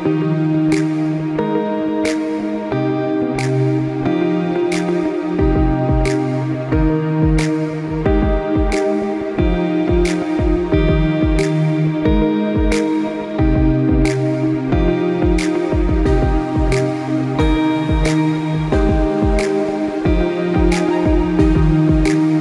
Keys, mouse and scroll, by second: 0.1 click, 1.2 right click, 1.9 click, 3.5 click, 4.9 click, 8.9 click, 11.1 click, 12.4 click, 13.5 click, 15.8 click, 18.3 right click, 18.8 click, 20.4 right click, 21.3 click.